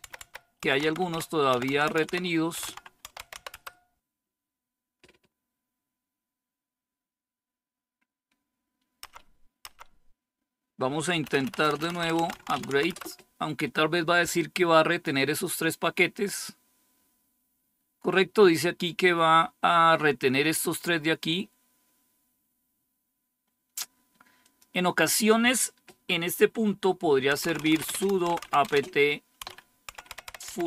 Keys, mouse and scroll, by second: 0.0-3.8 typing, 8.9 Up, 9.6 Up, 11.1-13.7 typing, 24.3 click, 27.0-30.6 typing.